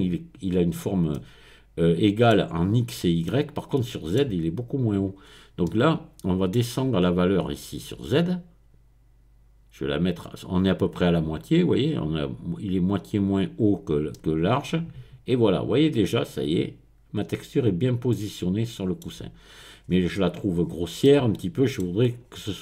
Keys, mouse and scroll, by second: 1.1-4.6 middle drag, 4.8 middle click, 5.2-6.2 scroll up 1, 6.2 middle click, 6.8-7.7 scroll up 1, 8.1-12.5 drag, 13.1 click, 14.1-19.4 middle drag, 19.9-20.6 scroll up 1, 20.6-21.0 scroll down 1, 21.0-22.0 middle drag, 22.2-22.6 scroll down 1.